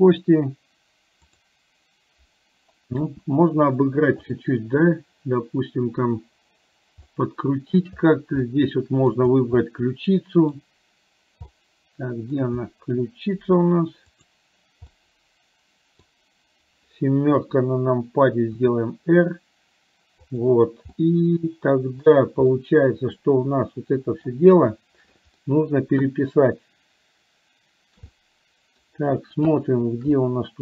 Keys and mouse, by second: 7.2 middle click, 8.5 middle click, 9.7-10.7 middle drag, 11.7 middle click, 14.2 click, 14.9-16.0 middle drag, 17.4 KP_7, 18.8 r, 21.0-22.2 middle drag, 22.5-24.4 middle drag, 25.5 middle click, 28.2 middle click, 30.2 middle click.